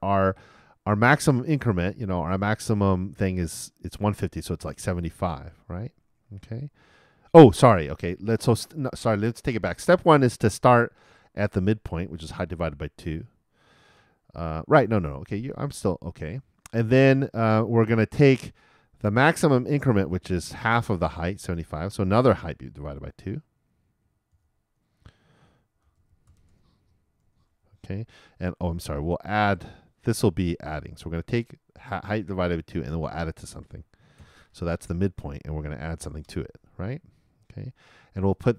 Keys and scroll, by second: 24.3 shift+9, 27.2-28.1 typing, 34.2 shift+=, 34.8 shift+n.